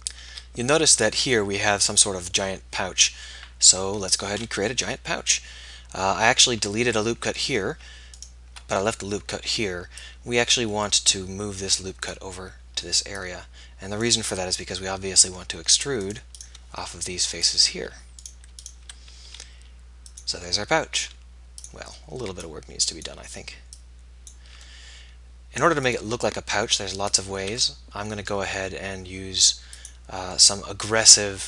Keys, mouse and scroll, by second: 0.3 z, 4.8 KP_1, 8.1-14.8 drag, 14.8-17.8 middle drag, 17.8 z, 19.4 e, 21.0 s, 24.7 middle click, 26.1-29.7 middle drag, 28.6 e.